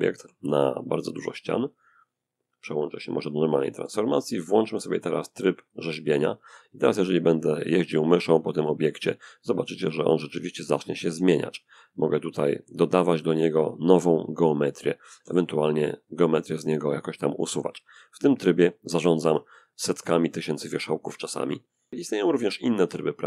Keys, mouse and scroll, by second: 2.0 click, 2.8 middle click, 3.8 click, 5.0 click, 5.9-10.6 drag, 8.1-10.6 middle drag, 10.4 f, 10.8-20.7 drag, 18.8-20.7 ctrl+middle drag, 21.6-22.0 scroll up 1, 22.0 click.